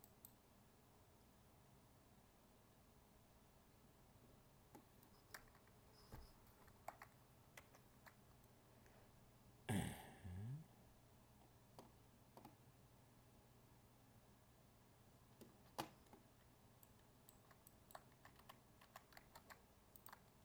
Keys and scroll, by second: 7.6 ctrl+f, 19.3 ctrl+Tab.